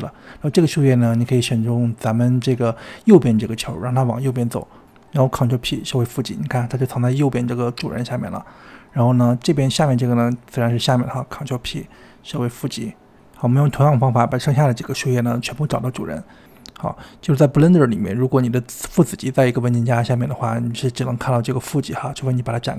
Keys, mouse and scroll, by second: 4.7 shift+click, 5.3 ctrl+p, 7.2 click, 10.7 shift+click, 11.8 ctrl+p, 12.1 ctrl+p, 12.4 click, 13.6 shift+click, 14.0 ctrl+p, 14.2 ctrl+p, 14.7 click, 16.4 shift+click, 16.8 ctrl+p, 17.3 click, 17.9 shift+click, 18.3 shift+click, 19.0-19.3 scroll down 1, 19.3 shift+click, 19.7 ctrl+p, 20.2 shift+click, 20.4 click, 20.7 shift+click, 21.0 shift+click, 21.2 ctrl+p, 21.5 ctrl+p, 21.8 click, 22.0 shift+click, 22.3 ctrl+p, 22.6 click.